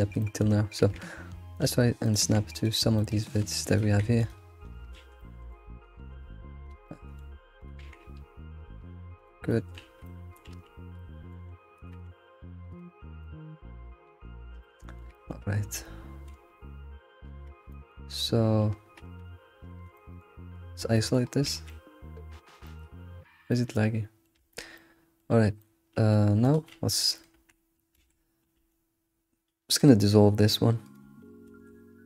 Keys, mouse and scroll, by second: 0.2-0.8 shift+middle drag, 0.8 g, 2.0 click, 2.2 g, 3.0 middle click, 3.7 click, 3.8 g, 5.0 ctrl+z, 5.2-6.0 middle drag, 6.0 g, 6.8 middle click, 7.6 click, 7.8 g, 9.5 middle click, 9.8 alt+x, 10.2 middle click, 10.5 alt+x, 11.0 middle click, 11.7 click, 11.9 g, 13.0 scroll down 1, 13.2-14.6 middle drag, 14.8 alt+middle click, 15.1 shift+middle click, 15.6 scroll up 3, 16.3 alt+x, 17.1 scroll down 3, 17.7-19.0 middle drag, 19.0 Tab, 19.3 scroll down 1, 19.7 alt+q, 20.0 middle click, 20.6-21.0 scroll down 4, 21.0-21.5 middle drag, 21.5 ctrl+s, 21.7-23.0 middle drag, 23.0-23.5 scroll up 3, 23.5-24.4 middle drag, 24.4 Tab, 24.7-26.4 middle drag, 26.4 click, 27.3-28.0 right drag, 28.0 ctrl+z, 28.6 d, 30.5 right click, 31.5 ctrl+z.